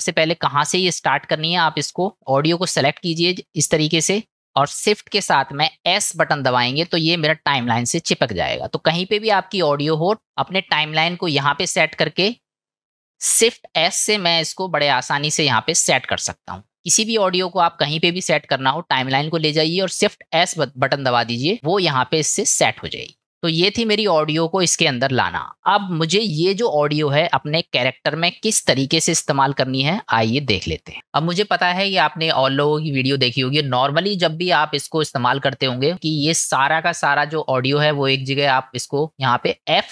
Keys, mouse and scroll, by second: 1.5 click, 3.4 click, 6.3 shift+s, 18.1-20.0 drag, 23.0 click, 35.9 shift+middle click, 37.5 middle click, 39.1 click.